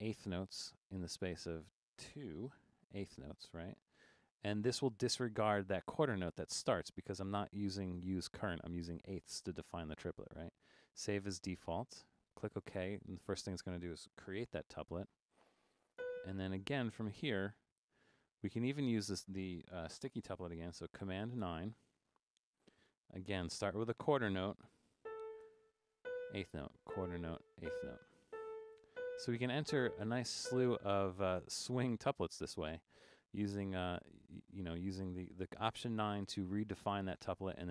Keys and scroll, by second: 2.6 2, 14.4 4, 15.7-16.4 typing, 21.4 super+9, 22.9 5, 24.9-31.0 typing.